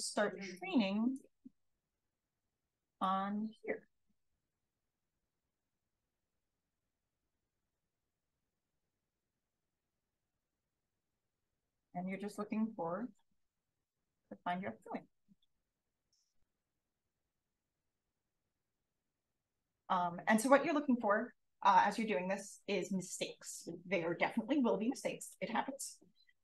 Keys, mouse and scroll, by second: 0.6 click, 1.8 d, 2.7 d, 3.0-4.3 drag, 5.6 d, 6.1 space, 6.5 click, 7.4 d, 8.2-11.4 drag, 10.8 space, 12.1-13.8 scroll up 1, 13.8-14.4 scroll up 1, 14.4 click, 16.6-17.3 scroll up 1, 17.3 d, 19.6 click, 20.0 d, 21.2 d, 21.7 d, 22.3 d, 26.0 d.